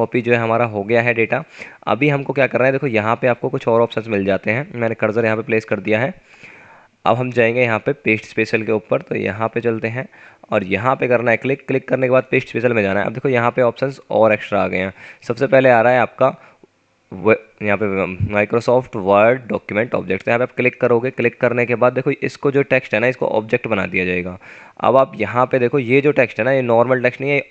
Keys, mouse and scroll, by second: 2.8 scroll down 1, 6.1 Return, 23.5 click, 25.5 F9, 26.9 scroll down 1.